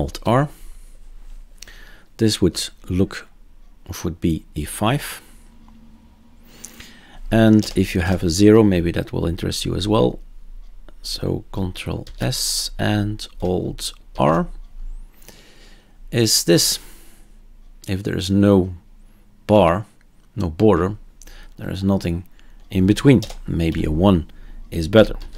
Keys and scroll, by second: 0.2 alt+r, 7.6-8.0 typing, 12.0 ctrl+s, 14.1 alt+r, 23.2-23.7 typing, 25.2 ctrl+s.